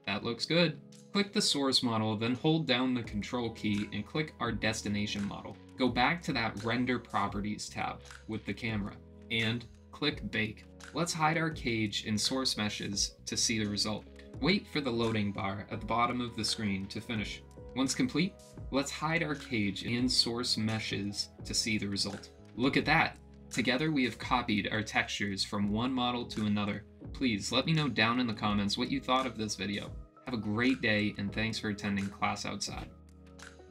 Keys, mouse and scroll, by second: 0.4-1.8 middle drag, 2.2-3.0 drag, 9.4 click, 18.5 drag, 20.1 click, 21.1 click, 21.8-22.6 drag, 22.6-25.7 middle drag, 26.2 KP_1, 27.4 click, 28.7 g, 30.3-33.7 middle drag.